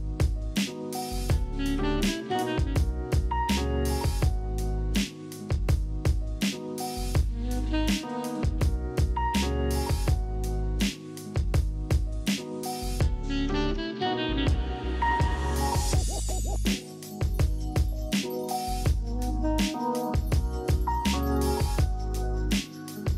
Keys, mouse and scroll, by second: 2.1 click, 4.0 click, 6.4 click, 8.3 right click, 8.3 click, 8.3 scroll, 9.2 right click, 9.6 middle click, 10.1 right click, 10.5 middle click, 13.2 click, 13.3-14.7 typing, 15.8 click, 17.5 click, 21.6 click.